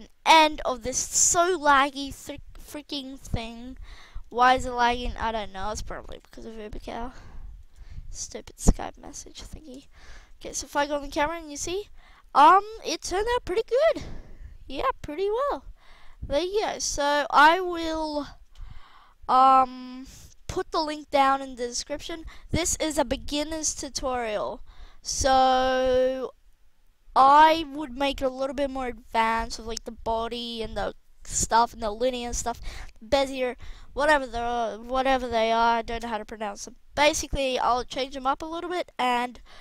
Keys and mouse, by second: 9.7 KP_0, 10.8 alt+a, 15.9 alt+a, 37.7-39.6 middle drag.